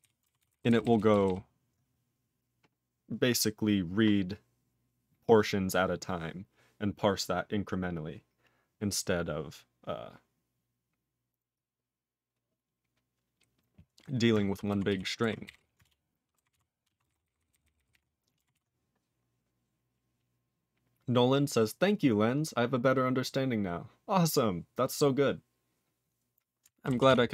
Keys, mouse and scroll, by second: 0.0 ctrl+e, 0.2 ctrl+e, 0.4 ctrl+s, 0.5 ctrl+n, 0.7 ctrl+n, 0.8 ctrl+n, 1.0 ctrl+n, 1.1 ctrl+n, 1.2 ctrl+n, 14.9 ctrl+s, 15.8 ctrl+Return, 16.5 ctrl+s, 16.9 ctrl+a, 17.0 ctrl+space, 17.1 ctrl+e, 17.1 ctrl+n, 17.2 ctrl+n, 17.4 ctrl+n, 17.5 ctrl+n, 17.7 ctrl+n, 17.8 ctrl+n, 17.9 ctrl+g, 17.9 ctrl+e, 18.5 ctrl+s, 27.1 ctrl+s.